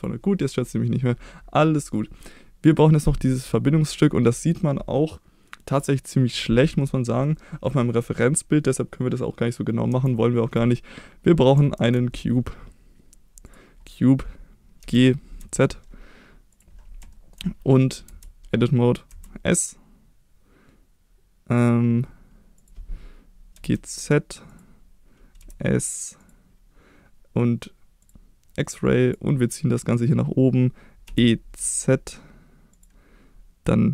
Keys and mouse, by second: 0.4 middle drag, 1.6-1.9 middle drag, 6.8-7.8 middle drag, 9.9 KP_1, 11.7 shift+a, 15.4 z, 16.5 click, 17.1 shift+middle click, 18.1 Tab, 19.1 s, 22.6 click, 23.5 g, 23.7 z, 24.5 click, 25.4 s, 26.2 click, 28.0 click, 28.6 click, 31.1 e, 31.6 z, 32.7 click.